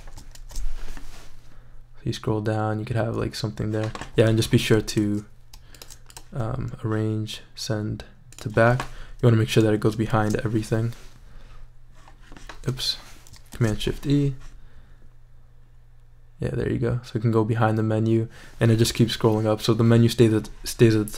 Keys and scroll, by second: 0.4 shift+super+e, 10.1 shift+super+e, 13.5 shift+super+e.